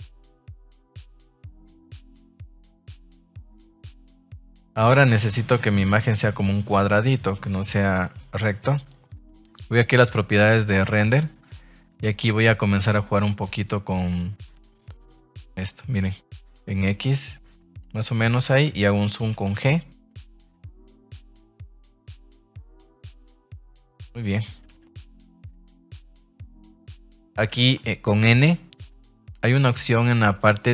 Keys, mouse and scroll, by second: 2.7 right click, 3.4 g, 4.4 click, 10.7 click, 12.2-17.9 drag, 19.3 g, 23.9 click, 24.6 g, 26.0 click, 28.2 n, 30.5 click.